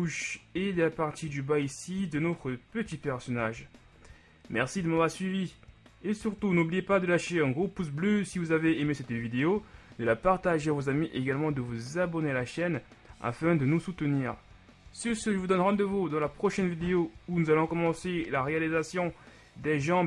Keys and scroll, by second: 2.7 KP_1.